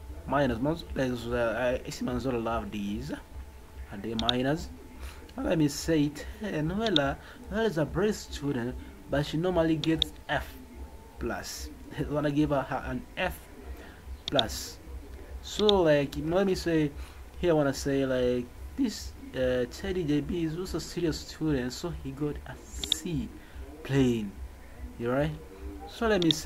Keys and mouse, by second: 4.2 click, 6.8 click, 9.8 click, 14.2 click, 15.7 click, 22.8 click.